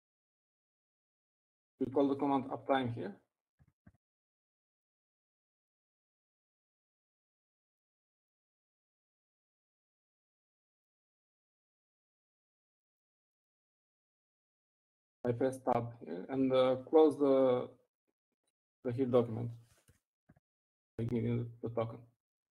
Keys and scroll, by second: 4.4 typing, 12.8 typing, 14.6 typing, 16.4 typing, 21.2-22.4 typing.